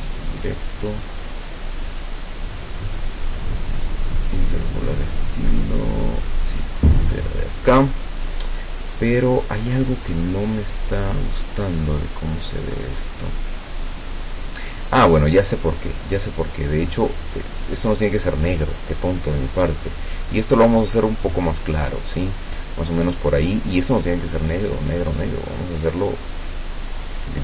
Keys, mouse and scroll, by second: 4.4 click, 6.1 click, 10.9 click, 15.3 click, 16.2 click, 16.9 click, 17.8 click, 19.6 click, 21.1-22.5 drag, 23.0 click, 24.4-27.4 drag.